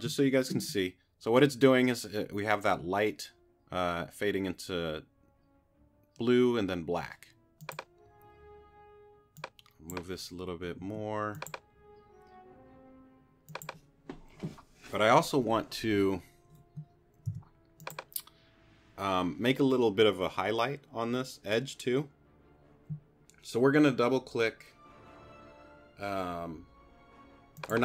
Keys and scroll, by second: 10.8 q, 17.3 t.